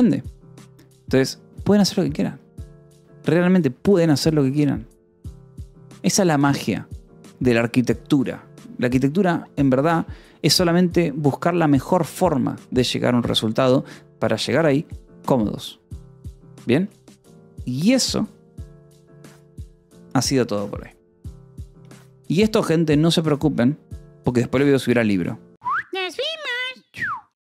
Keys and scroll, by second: 4.2 k, 4.9 j, 10.1 g, 18.3 j.